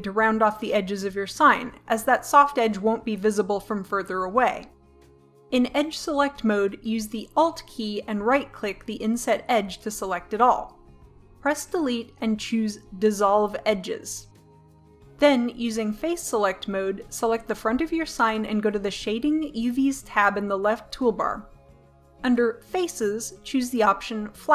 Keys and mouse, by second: 4.5 click, 8.7 click, 8.9 right click, 9.8-11.3 drag, 11.3 Delete, 16.3 middle click, 17.1-19.2 drag, 20.8-24.3 drag.